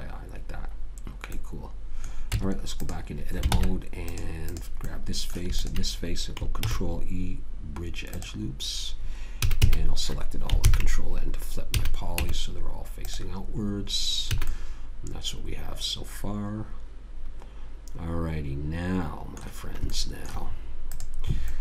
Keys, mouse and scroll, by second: 2.7 Tab, 3.9 ctrl+Tab, 4.8-7.3 drag, 6.9 ctrl+e, 9.7 a, 9.9 a, 11.0 ctrl+n, 12.0 a, 12.5 Tab, 14.2 Tab, 14.7 a, 20.2-21.6 middle drag, 21.2 click.